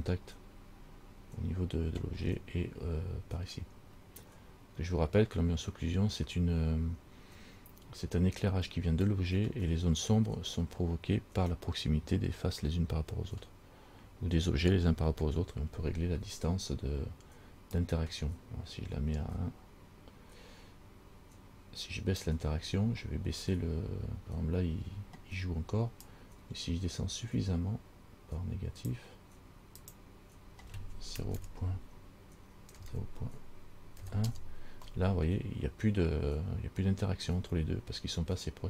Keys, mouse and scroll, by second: 2.6 scroll down 5, 17.9 click, 26.2 click, 30.0 click.